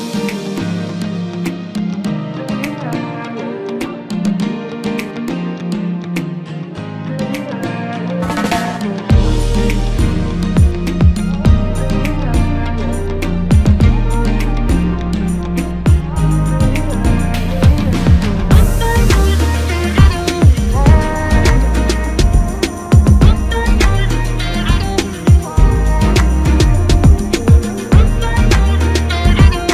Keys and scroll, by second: 11.6 ctrl+KP_Add, 12.2 ctrl+space, 25.4 ctrl+KP_Subtract, 26.0 ctrl+space, 29.1-29.6 typing.